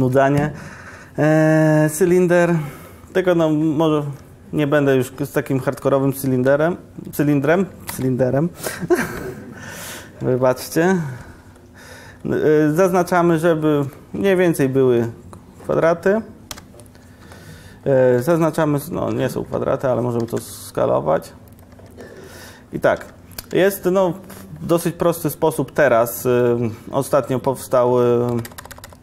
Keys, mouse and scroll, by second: 9.8 Tab, 10.8 Tab, 10.8 ctrl+r, 16.6 `, 18.9 `, 18.9 5, 19.2 4, 20.3 s, 21.8 Tab, 22.1 Tab, 22.2 Tab, 23.0 3, 24.9 3, 28.4 ctrl+KP_Add.